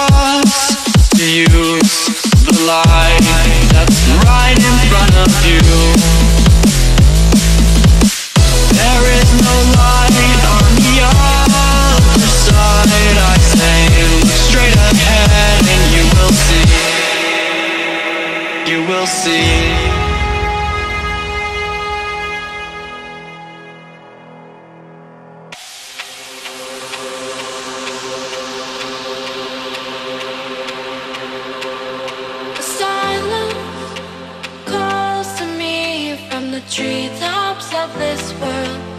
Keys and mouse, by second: 1.6 shift+click, 2.2-9.9 alt+drag, 10.4-18.2 alt+drag, 18.8 ctrl+=, 19.3 space, 19.4 click, 19.6 space, 20.7 ctrl+z, 21.8-28.8 drag, 35.9 click, 36.8 ctrl+-, 37.5 ctrl+=, 37.9 space, 38.1 click, 38.2 space, 38.7 click, 38.8 space.